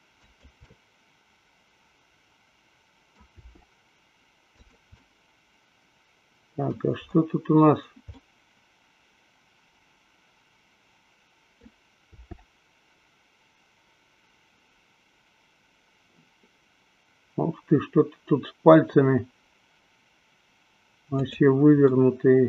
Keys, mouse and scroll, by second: 0.7 click, 0.9-3.8 middle drag, 3.6 r, 4.9 drag, 5.4-7.2 middle drag, 8.4-11.9 middle drag, 12.4 r, 22.2-22.4 middle drag.